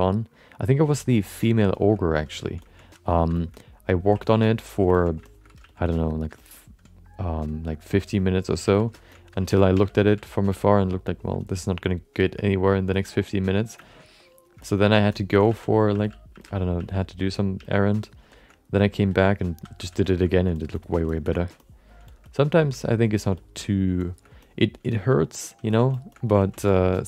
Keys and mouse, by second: 0.3 click, 0.9 click, 1.2 click, 1.7 shift+middle click, 1.9 alt+middle click, 2.3 ctrl+middle click, 2.6 alt+shift+middle click, 2.8 alt+middle click, 3.3 shift+middle click, 3.5 alt+middle click, 4.2 ctrl+alt+middle click, 4.4 alt+middle click, 4.9 ctrl+middle click, 5.2 shift+middle click, 5.6 f, 6.0 click, 6.5 alt+middle click, 6.9 click, 7.6 click, 8.0 click, 8.6 f, 8.9 shift+middle click, 9.1 alt+middle click, 9.4 ctrl+middle click, 9.7 f, 10.0 f, 10.8 click, 11.4 alt+shift+middle click, 11.9 middle click, 12.2 alt+shift+middle click, 12.3 alt+middle click, 12.9 alt+shift+middle click, 13.8 middle click, 14.0 middle click, 14.6 middle click, 14.7 alt+middle click, 15.1 alt+shift+middle click, 15.5-17.6 typing, 17.1 click, 17.9 click, 18.3 alt+shift+middle click, 18.8 ctrl+alt+middle click, 19.5 2, 19.8 f, 20.0 alt+shift+middle click, 20.2 alt+middle click, 20.5 shift+middle click, 20.7 middle click, 21.1 alt+shift+middle click, 21.2 middle click, 21.6 alt+middle click, 22.0 shift+middle click, 22.3 alt+middle click, 22.8 alt+shift+middle click, 23.0 alt+middle click, 23.3 shift+middle click, 23.6 alt+middle click, 24.0 alt+shift+middle click, 24.4 alt+middle click, 24.9 alt+shift+middle click, 25.2 alt+middle click, 25.7 ctrl+middle click, 25.9 alt+shift+middle click, 26.1 alt+middle click, 26.4 ctrl+alt+middle click, 26.7 alt+shift+middle click, 26.9 middle click.